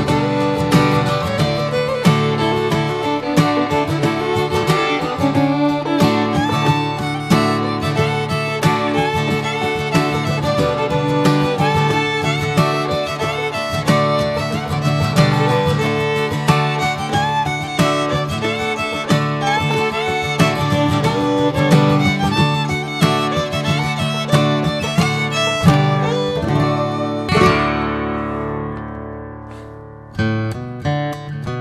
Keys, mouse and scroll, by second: 1.8 middle click, 2.2 Tab, 2.3 click, 2.6 click, 3.0-3.9 middle drag, 3.9 s, 5.0-5.5 middle drag, 5.5 drag, 5.8 click, 6.5 Tab, 9.1 middle click, 9.4 Tab, 9.6 click, 9.8 scroll down 4, 10.0-11.1 middle drag, 11.1 ctrl+s, 11.4 drag, 12.2 alt+middle click, 12.7 s, 14.7 drag, 15.4 /, 15.7-16.9 middle drag, 16.9 /, 17.7 drag, 18.0 /, 18.4-18.9 middle drag, 18.9 Tab, 19.1 click, 19.6 middle click, 20.1 shift+click, 20.5 middle click, 20.7 scroll up 1, 21.3 middle click, 24.0-27.7 right drag, 28.0 Tab, 28.2 drag, 28.5-28.9 middle drag, 28.9 click, 29.6 ctrl+a, 30.1 drag, 30.5-31.3 middle drag, 31.3 Tab.